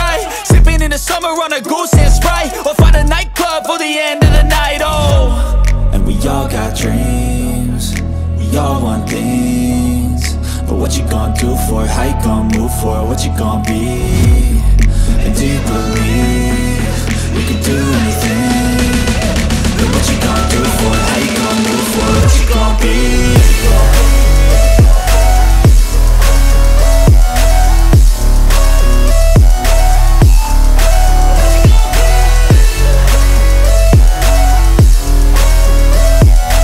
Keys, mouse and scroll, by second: 0.2 ctrl+super+z, 4.2 ctrl+super+z, 5.0 ctrl+super+z, 16.6 ctrl+super+z, 20.0 ctrl+super+z, 26.4 ctrl+super+z, 30.4 ctrl+super+z, 31.3 ctrl+super+z.